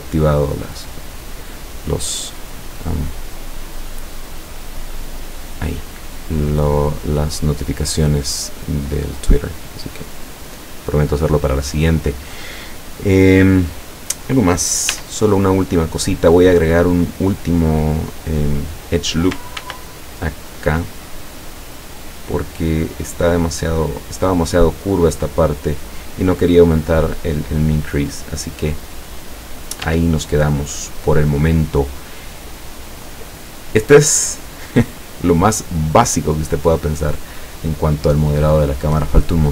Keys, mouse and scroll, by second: 1.2-4.1 middle drag, 5.0 click, 5.8-10.3 middle drag, 10.3-11.3 scroll up 1, 15.0 Tab, 19.6 ctrl+r, 21.1 click, 24.3 click, 27.9-30.0 middle drag, 29.9 Tab, 30.3-33.2 middle drag.